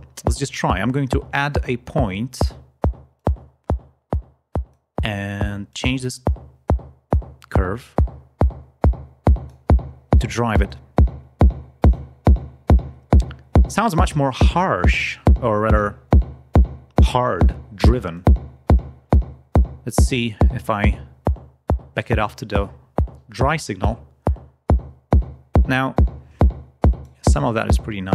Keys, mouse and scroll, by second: 2.3 right click, 3.1-4.8 drag, 5.6-9.6 drag, 10.6-12.0 drag, 18.0 click, 25.2-27.1 drag.